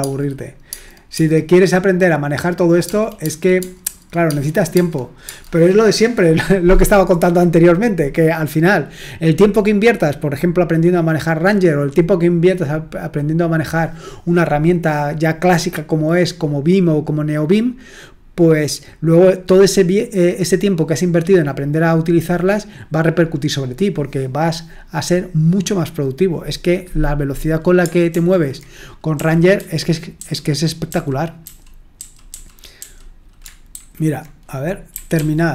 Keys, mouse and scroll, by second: 1.1 typing, 3.6-3.9 typing, 5.2 space, 28.1 super+l, 29.1-31.4 typing, 32.7 j, 33.7 super+h, 34.7-35.5 typing.